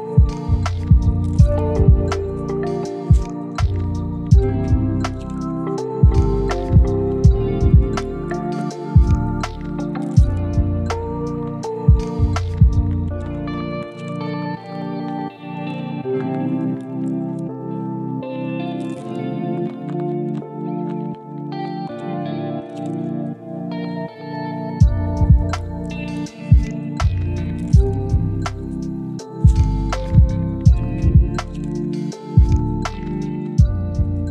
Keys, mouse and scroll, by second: 0.1 u, 0.7 scroll down 1, 0.9 middle click, 1.3-1.8 scroll down 1, 1.9 shift+middle click, 2.3 a, 2.5 u, 3.3 scroll up 1, 3.6 scroll down 1, 4.1 shift+middle click, 4.8 middle click, 5.1 scroll up 1, 5.3 shift+middle click, 6.2 ctrl+click, 7.4 ctrl+click, 8.3 ctrl+click, 8.9 u, 10.3 middle click, 12.0-12.4 scroll down 1, 12.4 a, 12.5 u, 15.6 double click, 16.8-17.3 scroll up 1, 17.4 shift+click, 17.7 scroll down 1, 17.9 u, 18.5 g, 19.3 s, 19.9 shift+middle click, 20.5 r, 21.7 ctrl+click, 21.9 ctrl+g, 23.5 shift+click, 23.8 g, 24.7 r, 25.3 ctrl+click, 25.5 s, 26.1 g, 27.6 ctrl+click, 28.2 shift+click, 29.4 g, 31.3 shift+click, 32.4 s, 33.8 g.